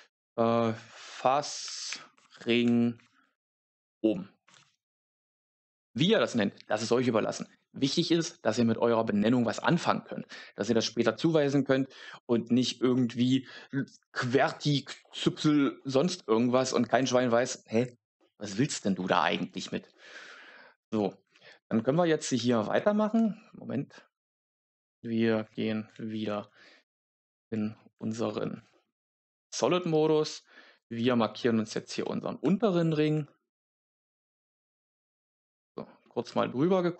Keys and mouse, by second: 0.9 BackSpace, 12.2 Tab, 16.4 Tab, 16.9 Tab, 21.2 Tab, 23.1 Tab, 25.3 z, 30.7 alt+right click, 31.5 alt+shift+right click, 35.0 alt+shift+right click.